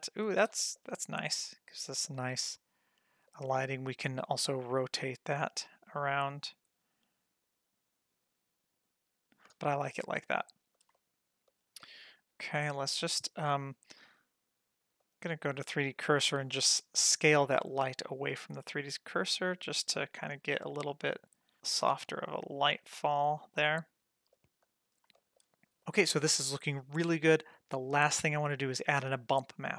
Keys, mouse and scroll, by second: 0.6 shift+middle click, 0.9-1.3 middle drag, 1.5 scroll down 1, 2.1-3.3 shift+middle drag, 3.9-9.6 drag, 9.8-10.5 middle drag, 10.6 scroll up 1, 10.9-11.5 shift+middle drag, 11.6 scroll down 1, 11.8 middle click, 12.8 click, 15.0-15.8 drag, 17.0 s, 21.5 g, 22.7 s, 24.3 shift+middle click, 24.3 scroll up 1, 24.8 scroll down 1, 25.1 shift+middle click.